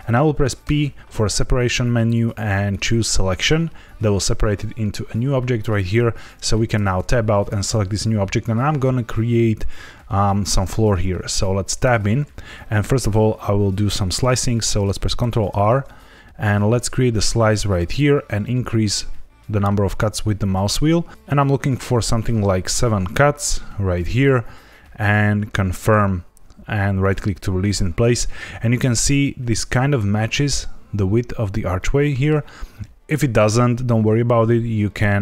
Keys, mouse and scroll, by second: 0.6 p, 6.7 Tab, 7.3 click, 11.8 Tab, 15.1 ctrl+r, 26.9 right click, 31.7 middle click.